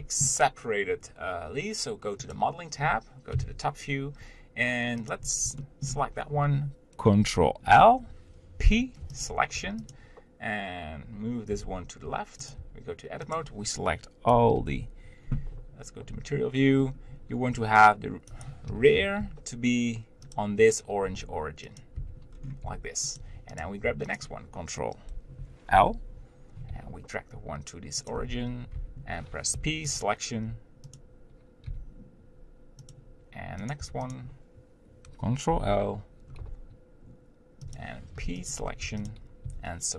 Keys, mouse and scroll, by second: 0.0-2.2 shift+middle drag, 2.2 click, 3.3 KP_7, 5.1 click, 5.6-7.6 shift+middle drag, 7.6 ctrl+l, 9.2 p, 9.6 Tab, 9.9 click, 11.6 g, 12.6 Tab, 13.3 click, 14.5 ctrl+l, 16.3 z, 16.8-17.6 scroll up 1, 17.6 g, 18.7 o, 21.1 g, 22.1 Tab, 22.3 scroll down 2, 22.7 g, 23.8 Tab, 24.0 click, 25.7 ctrl+l, 26.7 g, 28.2 Tab, 28.8 Tab, 30.0 p, 30.4 Tab, 31.0 click, 31.7 g, 33.8 Tab, 34.0 click, 35.5 ctrl+l, 36.4 g, 38.5 p, 38.8 Tab, 39.0 click, 39.4 g.